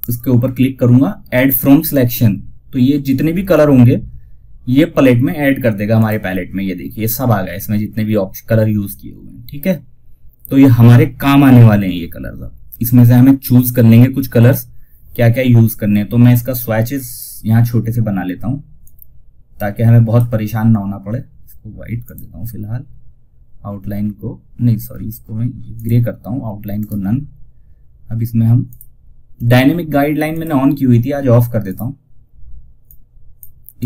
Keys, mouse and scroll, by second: 5.3 click, 16.4-21.3 drag, 16.4 typing, 25.0 click, 26.0 right click, 28.0-33.8 drag.